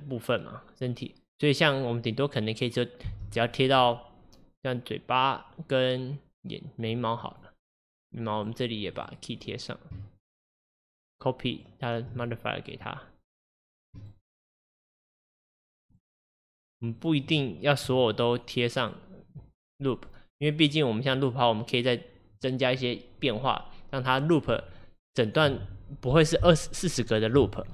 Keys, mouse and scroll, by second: 3.1 space, 7.3 click, 7.8 click, 8.4 click, 9.0 click, 9.5-10.1 scroll up 2, 10.1 shift+middle click, 10.8 shift+click, 13.8-27.7 drag.